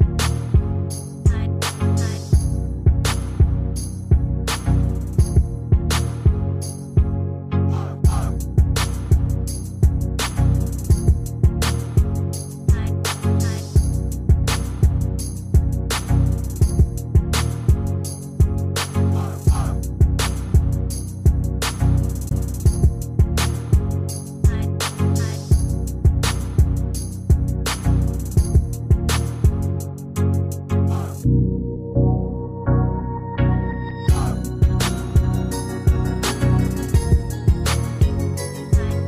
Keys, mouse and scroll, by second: 0.9 Return, 9.1 shift+click, 11.5 ctrl+a, 12.5 typing, 14.0 typing, 14.1 ctrl+a, 19.2 typing, 20.7 Caps_Lock, 22.5 Return, 22.5 typing, 26.8-27.5 typing, 36.1 ctrl+click.